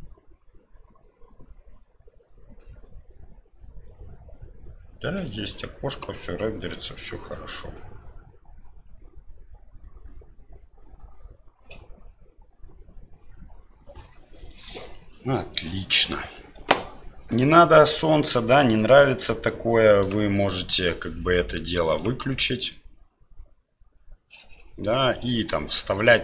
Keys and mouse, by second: 18.7-20.0 drag, 21.8 click.